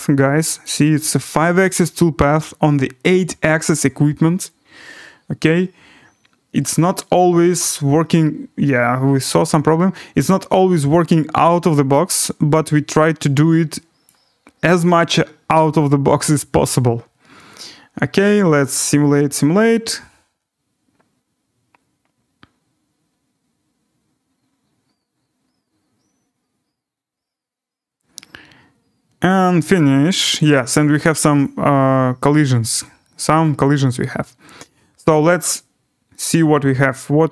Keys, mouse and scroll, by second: 0.6 click, 14.0 click, 16.2 right click, 30.4 click, 31.4 click, 31.8 scroll, 33.0-33.7 scroll, 33.7 click, 33.7 scroll down 5, 35.0 scroll up 4, 35.3 click, 36.1-36.5 scroll down 2, 36.5 scroll.